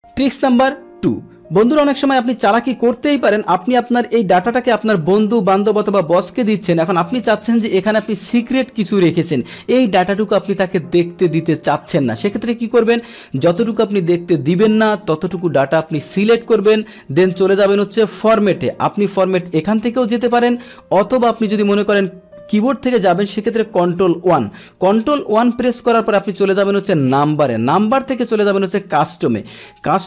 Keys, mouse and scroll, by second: 2.2-8.2 drag, 13.8-20.4 drag, 21.8 click, 24.1 ctrl+1, 25.9 click, 27.0-29.7 drag.